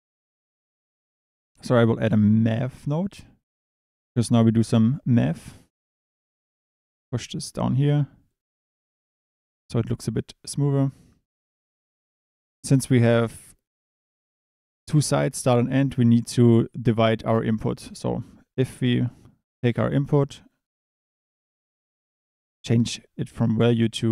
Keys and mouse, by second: 0.0 click, 1.2 click, 1.5 shift+a, 7.7 click, 8.3 click, 18.1 drag, 20.9 click, 23.4-24.1 drag.